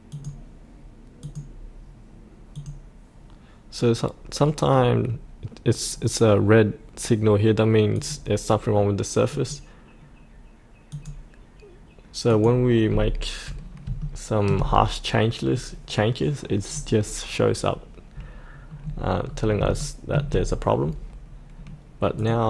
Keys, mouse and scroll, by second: 12.8-13.8 scroll up 1, 13.9 shift+middle click, 15.4-19.2 scroll down 1, 19.2-19.6 scroll up 1, 19.7 shift+middle click, 22.1 click.